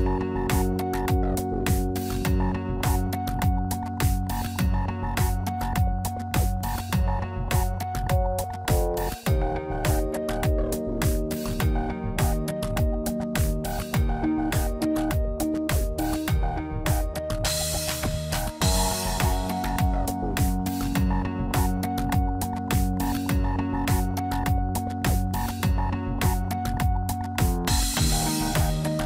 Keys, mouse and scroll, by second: 3.1 click, 3.6 middle click, 4.5 click, 6.8-7.4 scroll up 2, 7.2 middle click, 9.3 a, 9.8 s, 12.5 middle click, 14.1 click, 14.6 shift+click, 15.2 middle click, 17.9 Tab, 18.2 middle click, 20.5 Tab, 21.7 shift+middle click, 23.0 i, 24.6 Tab, 25.3 ctrl+a, 26.9 scroll down 1, 27.0 middle click, 27.3 Tab, 28.1 click.